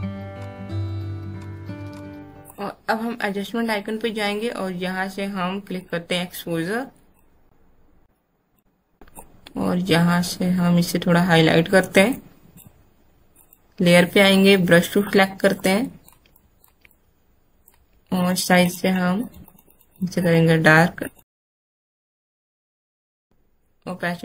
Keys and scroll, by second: 17.8 alt+x, 21.4 space, 22.4 space, 22.5 x, 23.0 alt+space.